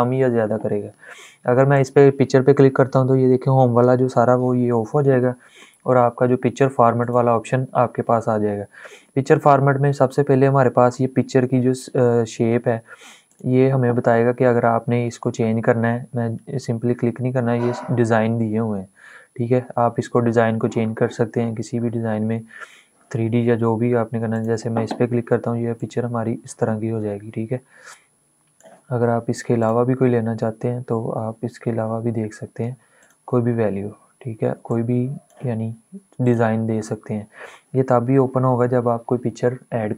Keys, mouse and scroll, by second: 3.5 click, 6.7 click, 13.0 click, 24.0-29.3 drag.